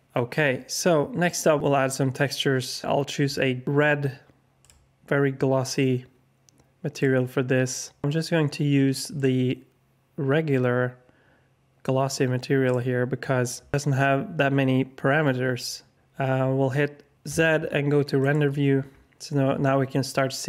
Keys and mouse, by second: 2.9 alt+shift+click, 9.3-12.7 drag, 17.3 z.